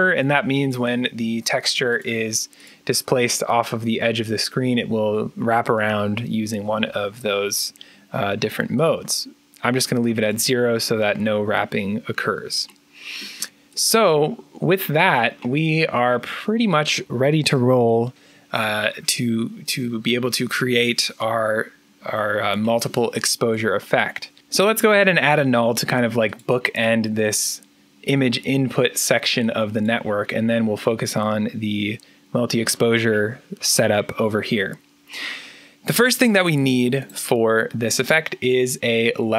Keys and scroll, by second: 24.4 Delete, 25.4 alt+n.